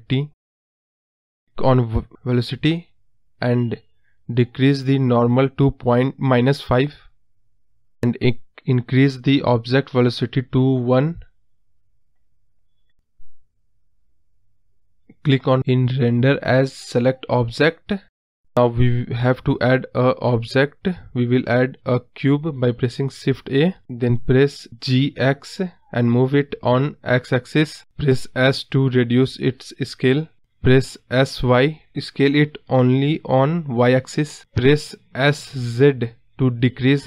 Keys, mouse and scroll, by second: 3.0-5.8 drag, 6.0 scroll down 1, 6.3-9.9 middle drag, 10.3-11.4 drag, 11.4 scroll down 2, 11.6-13.5 middle drag, 15.0 space, 21.1-22.1 drag, 22.1-22.9 scroll down 1, 22.9-23.9 middle drag, 23.9 shift+a, 24.2-24.6 scroll up 3, 24.6 scroll down 1, 24.6-25.3 scroll up 2, 25.3 KP_Decimal, 25.5-26.3 scroll down 9, 26.3-27.4 middle drag, 27.4 g, 29.1 KP_Decimal, 29.4-29.8 scroll down 9, 29.8-31.7 middle drag, 31.7-32.5 scroll down 4, 32.5-34.3 scroll up 1, 34.3 s.